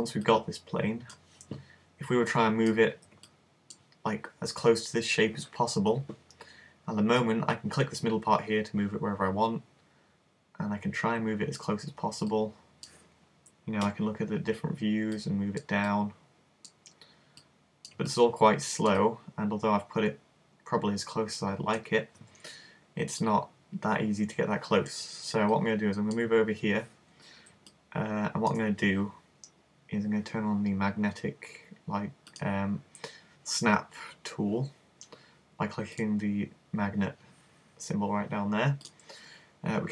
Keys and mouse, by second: 0.3 click, 2.4 click, 2.9 z, 3.3 middle click, 7.3 click, 12.4 click, 13.9 KP_1, 14.0 click, 15.2-19.4 drag, 18.2 middle click, 19.4-20.8 middle drag, 23.3 click, 25.6 click, 27.8 middle click, 32.3 click, 36.0 click, 38.9 click.